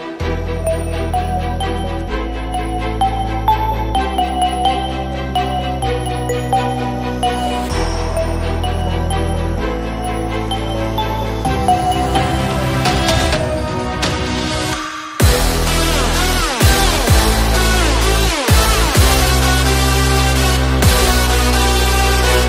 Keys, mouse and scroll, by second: 1.0 n, 1.7 click, 2.0 click, 2.5 x, 3.1 shift+a, 4.6 s, 6.1 click, 7.6 shift+a, 9.8 click, 10.5 click, 11.3 click, 13.2 s, 14.8 Tab, 15.3-17.1 typing, 18.4 Tab, 19.7 click, 20.1 l, 20.8 click, 22.0 click.